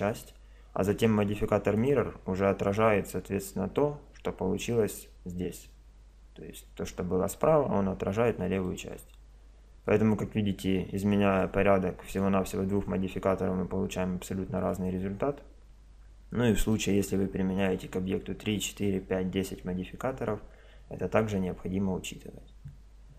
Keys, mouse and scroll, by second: 1.8-3.5 drag, 8.6-10.6 middle drag, 12.1-13.8 drag, 14.6-16.4 drag, 16.7-18.6 middle drag.